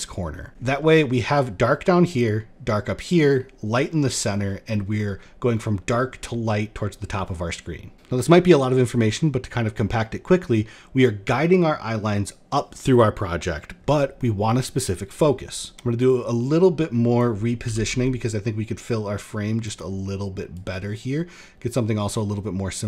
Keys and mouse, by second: 15.7-16.7 drag, 17.1 r, 20.0 click, 20.3-22.8 drag.